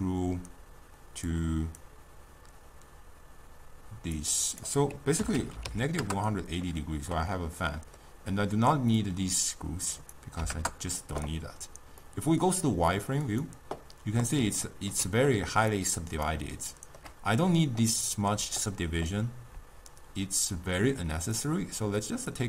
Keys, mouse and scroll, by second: 7.4-9.2 middle drag, 9.2-13.5 drag, 15.9-22.4 drag.